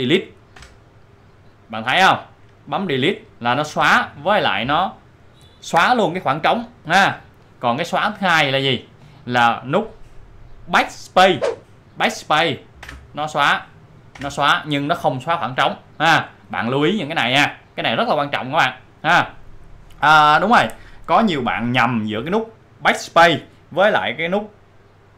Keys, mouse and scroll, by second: 2.5 click, 9.0 click, 12.8 F11, 13.9 click, 17.9 click.